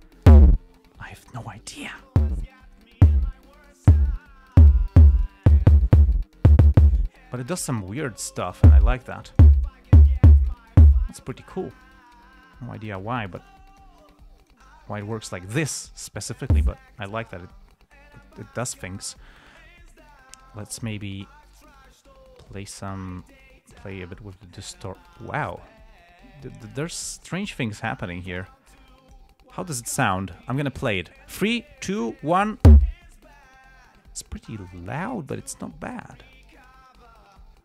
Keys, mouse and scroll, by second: 0.3-1.8 drag, 1.9 click, 2.9 click, 4.6 click, 5.6 click, 8.3 click, 9.5 click, 10.8 click, 12.4 click, 14.0 click, 14.7 click, 15.4 click, 15.8 click, 16.1 click, 21.6-22.2 drag, 23.5-25.3 drag, 25.4-27.1 drag, 27.6 right click, 27.9 right click, 28.8-29.7 drag, 36.2-37.6 drag.